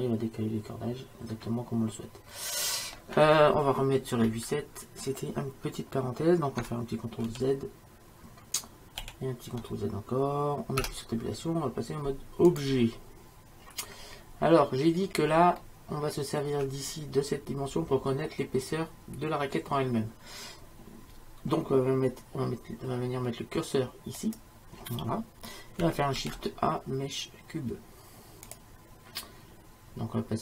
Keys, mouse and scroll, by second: 4.5 KP_7, 7.7 ctrl+z, 9.4 ctrl+z, 11.0 Tab, 14.3-17.6 middle drag, 24.2-26.2 drag, 26.2 shift+a.